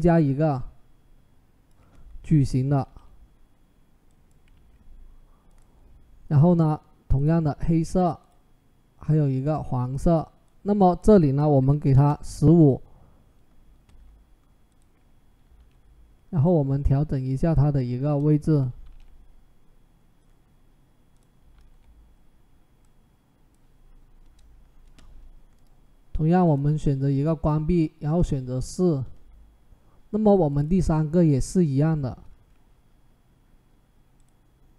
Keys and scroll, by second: 3.5 ctrl+t, 4.3 Escape, 11.2-12.0 typing, 15.3 ctrl+t, 17.8 Return, 18.6 ctrl+t, 21.3 ctrl+t, 24.0 Return.